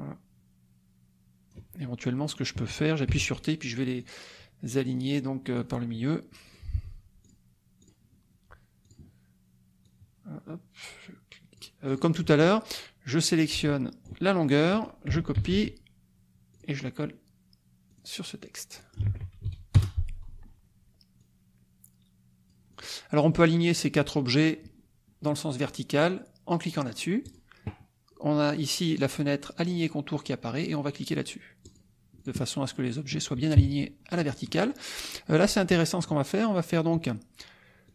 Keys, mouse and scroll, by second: 3.1 t, 4.0-5.7 drag, 6.6 click, 7.2 click, 7.8 click, 8.8 click, 9.8-11.7 drag, 12.0 click, 13.4 ctrl+click, 14.7 click, 15.4 ctrl+c, 16.5 click, 17.9 click, 18.8 ctrl+click, 19.1 ctrl+v, 19.7 Return, 21.2-22.9 drag, 23.2-24.4 drag, 27.2 click, 31.6 click, 32.2 click, 33.5 KP_Subtract, 34.2 middle click, 35.7 click, 37.8 click.